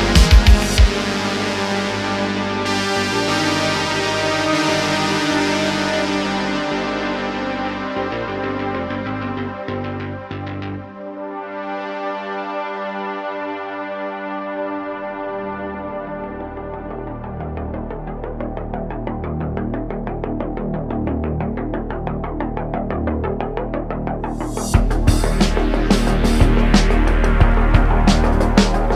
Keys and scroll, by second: 0.9 Tab, 2.3 Tab, 3.1 2, 3.6 e, 3.9 x, 6.0 2, 8.0 2, 8.3 ;, 13.9 d, 14.1 3, 14.1 1, 14.1 1, 21.1 m, 21.7 x, 22.9 3, 23.2 2, 24.0 f, 24.8 1, 27.9 3, 28.3 Tab.